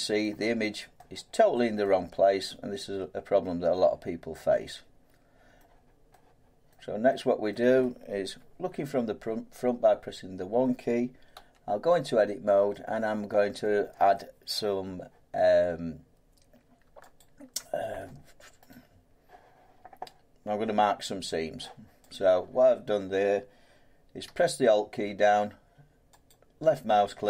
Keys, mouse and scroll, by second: 0.2 middle click, 0.9 scroll up 1, 1.8 middle click, 2.5 scroll up 1, 4.3 scroll down 1, 5.5 middle click, 6.3 scroll up 1, 6.7 middle click, 6.7 scroll down 1, 7.1 scroll up 1, 8.3 1, 9.5-11.3 scroll, 11.3 Tab, 12.2 scroll, 13.6 middle click, 17.2 alt+click, 18.7 right click, 22.1 click, 26.3 alt+click.